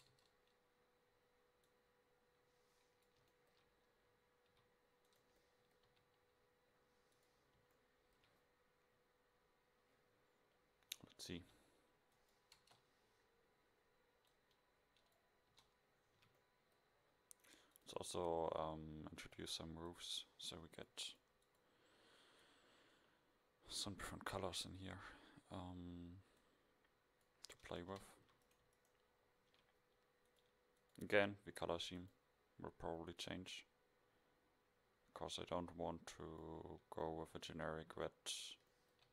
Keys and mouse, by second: 0.2 KP_0, 3.8 middle click, 4.6 e, 6.0 KP_7, 10.7 middle click, 11.7 g, 12.7 KP_0, 15.6 Tab, 16.3 a, 23.5 middle click, 27.7 Tab, 28.3 a, 28.6-30.4 drag, 30.6 middle click, 31.3 Tab, 34.0 middle click, 37.3-37.6 a, 37.9 a.